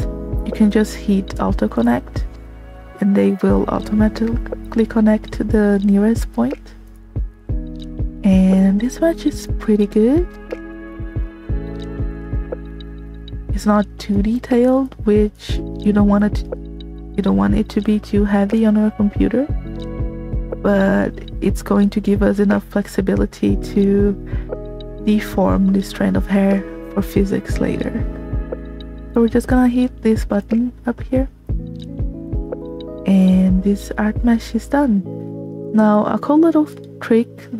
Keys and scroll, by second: 7.3 space, 14.0 space, 19.6 space, 31.2 space.